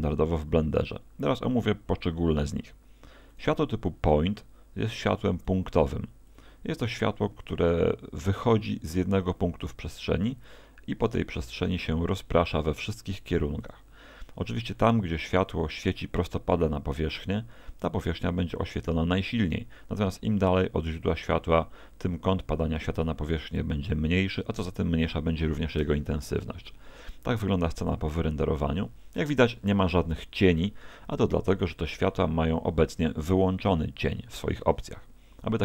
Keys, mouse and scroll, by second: 4.9 click, 6.3 click, 9.0 click, 11.6 shift+d, 13.7 click, 34.4 Escape.